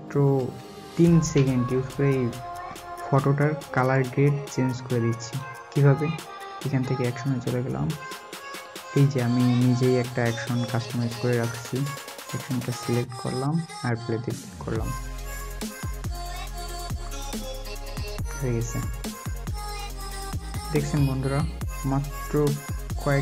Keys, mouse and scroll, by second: 0.3 alt+scroll, 0.3-1.1 alt+scroll down 1, 19.8 alt+scroll up 1, 20.8 alt+scroll up 1.